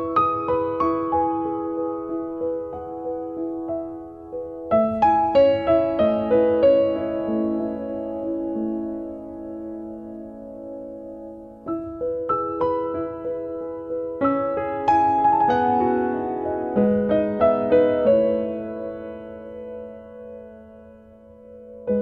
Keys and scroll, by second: 3.6 b.